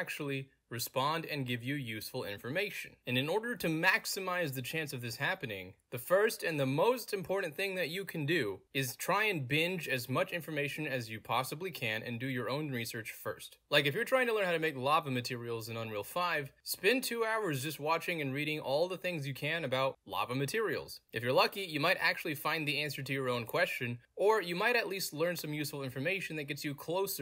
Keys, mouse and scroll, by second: 1.8 click, 2.7 middle click, 2.7-3.3 scroll down 2, 5.0 click, 7.9 click, 9.1 middle click, 9.1 scroll down 2, 13.8 scroll down 3, 18.7 middle click, 18.7-19.4 scroll down 3, 19.1 middle click, 24.2 middle click, 24.2-24.6 scroll down 3.